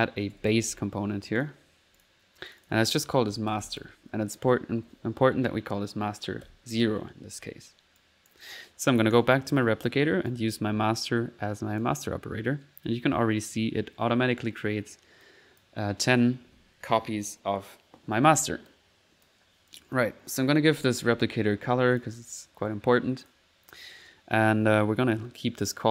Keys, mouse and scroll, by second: 0.0-1.1 typing, 1.4 click, 2.0 click, 2.5 click, 8.0 click, 9.1 click, 10.3-11.9 drag, 15.2 click, 18.7 click, 19.7 click, 20.3-22.1 typing, 20.3 click, 21.9 click, 22.5 middle click, 23.2 click, 23.7 middle click.